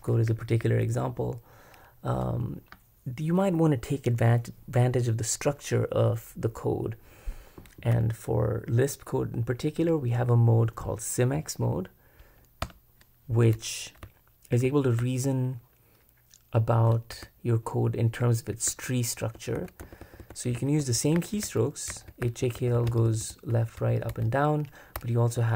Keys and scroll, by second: 0.2 j, 0.6 j, 12.6 Return, 14.0-20.2 typing, 22.5 typing, 23.8-25.5 typing.